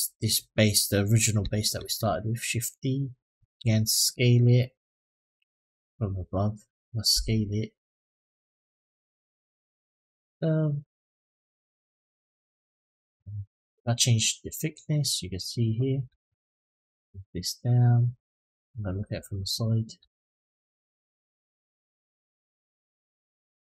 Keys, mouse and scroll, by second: 1.6 shift+d, 2.5 click, 3.2 s, 5.6 click, 6.9 s, 8.5 click, 9.7 s, 11.4-12.4 middle drag, 14.2-15.4 drag, 16.9 click, 18.5 click, 19.3-19.8 scroll up 2, 19.9 shift+middle drag, 20.5-22.5 scroll up 6, 22.5-23.6 drag.